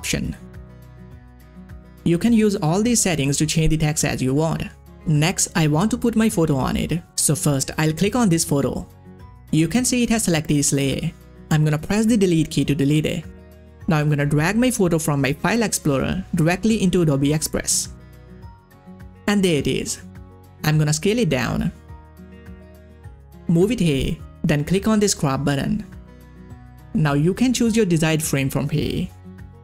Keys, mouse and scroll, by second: 1.7 click, 6.1 click, 6.4 click, 15.0 click, 15.0-24.3 drag, 16.3-17.6 drag, 25.1 click, 26.3 click, 26.3-27.5 scroll down 1, 28.0 scroll down 1, 28.0 click, 28.9 click, 28.9 click.